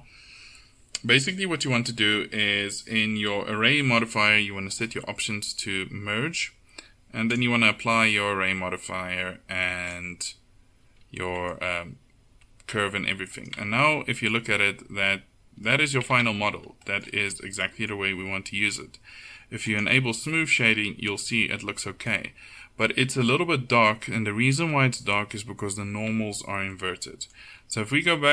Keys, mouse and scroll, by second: 13.6 Tab, 16.2 Tab, 26.2 Tab.